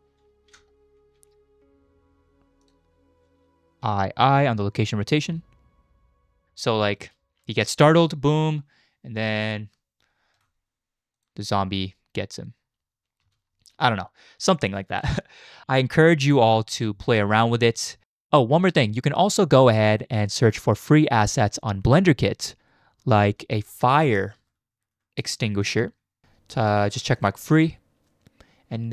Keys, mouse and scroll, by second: 1.0 shift+`, 3.8 i, 4.2 i, 5.1 click, 5.3 space, 6.6-7.0 drag, 7.0 space, 11.1 click, 13.2 space, 15.6 space, 16.7 space, 18.0 space, 20.3-27.5 drag.